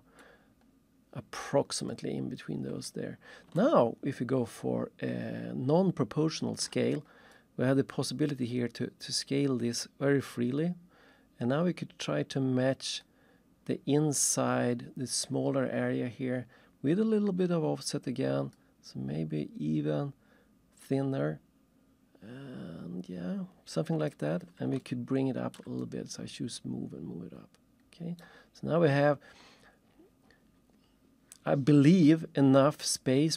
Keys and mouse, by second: 0.2 middle click, 1.9 middle click, 2.9 middle click, 3.6 ctrl+shift+middle click, 7.3 click, 14.2 click, 18.5 click, 24.1 click, 24.8 ctrl+shift+middle click, 25.8 right click, 28.2 right click.